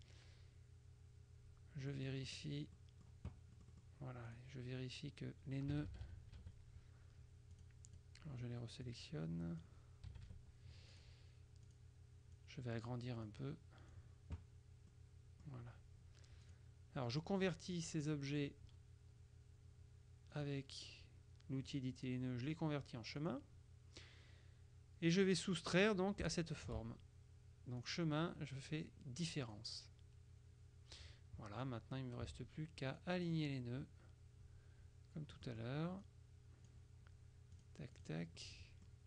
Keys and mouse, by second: 1.9 click, 3.7 click, 5.9 KP_Subtract, 7.7 click, 8.9 click, 10.2 KP_Subtract, 11.0 click, 11.8 click, 12.5 click, 15.0 click, 16.5 click, 18.4 click, 20.4 click, 21.8 click, 23.3 click, 26.4 shift+click, 27.9 click, 29.5 click, 31.7 click, 32.9-34.0 drag, 35.5 middle click, 37.7-38.7 drag.